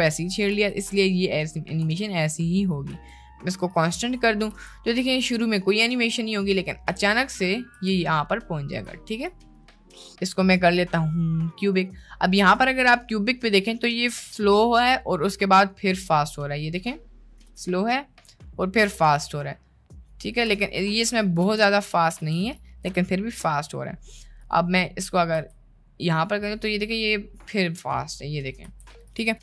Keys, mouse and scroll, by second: 0.5 space, 1.9 space, 2.3-2.7 drag, 3.0 t, 4.4 space, 7.8 space, 8.9 click, 9.7 t, 17.3 space, 20.5 space, 21.2 click, 21.6 space, 22.2 space, 22.4 drag, 22.8 t, 25.5 space, 28.7 space, 29.1 click.